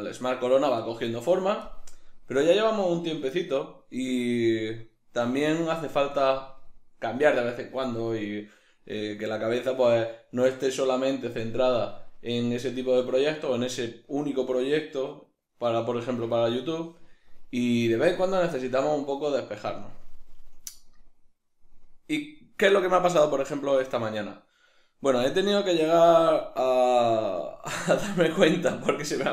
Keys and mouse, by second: 5.0-9.0 middle drag, 26.0-29.3 middle drag.